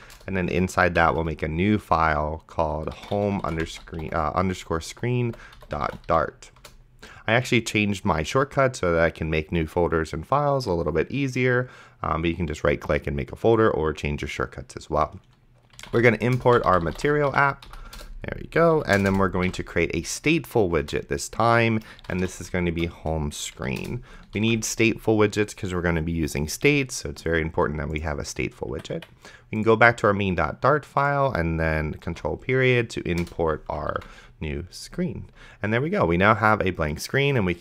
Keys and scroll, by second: 0.0-0.1 typing, 0.1 Return, 1.3 ctrl+shift+n, 2.6-6.6 typing, 6.6 Return, 16.0-17.8 typing, 18.0 Return, 18.7 End, 19.0 Return, 19.4 s, 19.7 t, 20.1 Down, 20.8 Return, 21.9-22.8 typing, 23.6 Down, 23.8 Return, 24.7 ctrl+s, 29.0 Escape, 32.3 ctrl+., 33.2 Return, 34.2 ctrl+s.